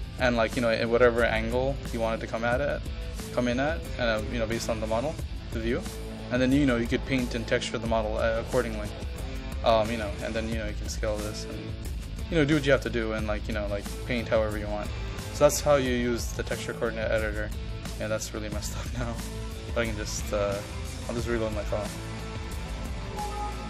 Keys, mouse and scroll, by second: 19.6 ctrl+z, 20.3 ctrl+z, 21.1 click, 21.6 ctrl+z, 22.5-23.6 drag.